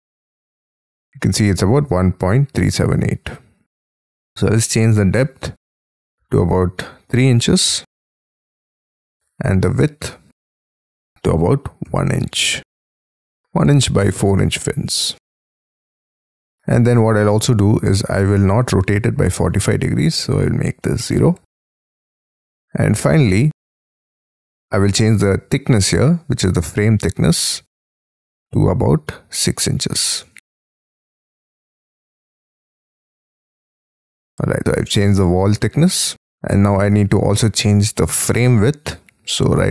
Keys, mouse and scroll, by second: 7.1 3, 7.6 shift+', 11.0 1, 11.8 shift+', 12.4 Tab, 13.7 Tab, 14.3 shift+', 14.8 Tab, 21.1 0, 26.2 scroll down 3, 27.7 Escape, 28.8 space, 30.1 6, 30.8 shift+[, 31.6 F12, 32.1 BackSpace, 32.4 Tab, 34.3-36.4 scroll up 1.